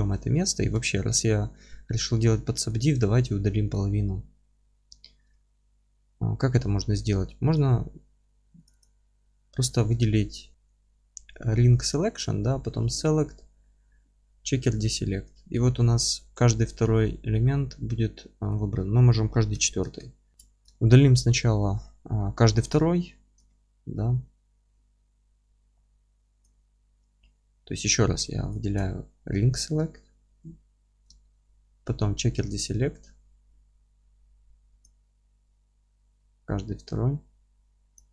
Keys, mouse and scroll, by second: 2.7 click, 3.0 alt+middle click, 3.4 2, 3.7 click, 5.3-7.5 alt+middle drag, 7.5 click, 8.7 click, 10.0-14.7 alt+middle drag, 14.7-20.3 drag, 19.9 KP_Enter, 20.3 ctrl+shift+z, 20.3-22.5 middle drag, 22.6 click, 23.4-26.4 alt+middle drag, 25.7 a, 26.4 click, 29.9-34.9 alt+middle drag, 34.9-38.1 drag.